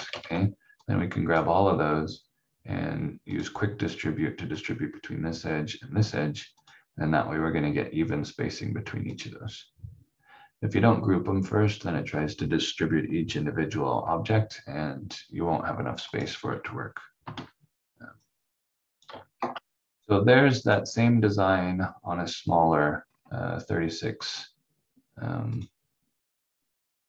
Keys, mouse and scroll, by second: 0.0 ctrl+z, 0.8 click, 16.0 click, 17.2 F4, 18.2 click, 19.3 shift+F2, 20.6 click, 22.4-23.0 scroll down 1, 25.5 click.